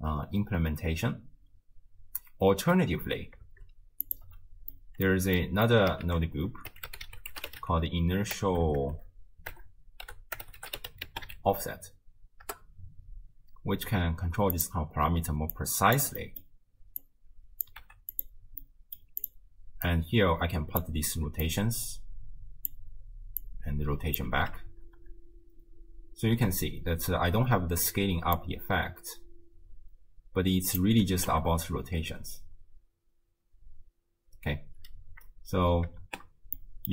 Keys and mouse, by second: 2.5 space, 3.5 shift+space, 4.1 click, 4.3 m, 4.8 click, 5.4 middle click, 5.5 click, 6.1 ctrl+a, 8.6 BackSpace, 8.7 BackSpace, 8.9 BackSpace, 15.6 click, 16.2 middle click, 17.0-17.7 drag, 17.9 g, 18.6 middle click, 19.2-20.8 drag, 21.4-22.8 drag, 23.5 click, 24.7 shift+space, 26.7 space, 28.4-30.8 drag, 31.2 shift+space, 34.6 space, 36.0 shift+space, 36.6 click.